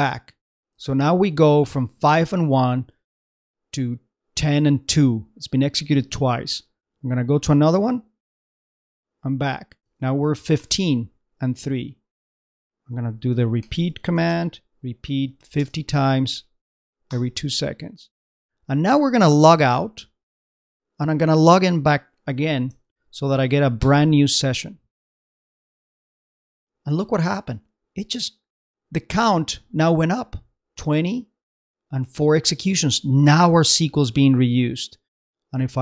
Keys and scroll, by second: 0.8 super+Tab, 6.0 super+Tab, 10.0 super+Tab, 10.5 super+/, 18.1 super+Return, 18.3 super+Tab, 25.7 super+Home, 25.9 super+Tab, 33.8 super+Tab.